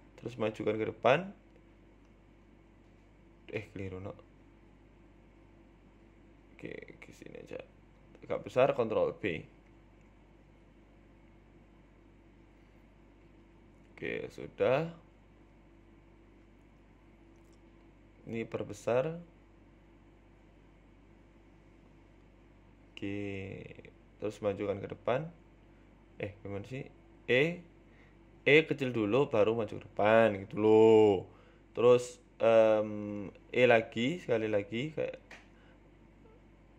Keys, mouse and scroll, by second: 0.0 s, 0.0 e, 1.2 g, 5.6-7.5 typing, 5.9 alt+shift+right click, 7.0 alt+shift+right click, 8.8 s, 9.9 ctrl+b, 11.7 scroll up 2, 11.9 shift+middle click, 12.1 click, 13.7 e, 18.1 ctrl+r, 19.6 s, 20.6 ctrl+b, 23.2 click, 24.1-25.2 scroll down 6, 24.3 shift+middle click, 25.2 scroll down 1, 25.3 e, 26.7 scroll up 2, 27.9 s, 28.7 e, 29.6 ctrl+z, 29.9 s, 30.5 e, 31.2-31.8 scroll down 6, 31.4 shift+middle click, 31.8 shift+middle click, 32.0-32.5 scroll up 3, 32.2 shift+middle click, 34.5 shift+middle click, 34.8-35.3 scroll up 3, 35.1 shift+middle click, 36.4 h.